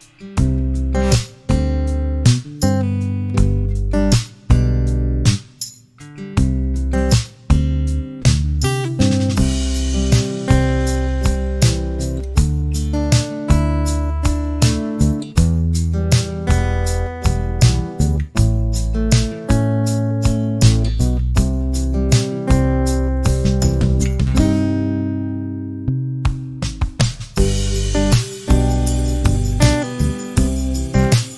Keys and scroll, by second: 1.0 space, 3.7 p, 11.0 m, 14.8 space, 18.5 m, 22.9 space, 25.4-27.6 typing.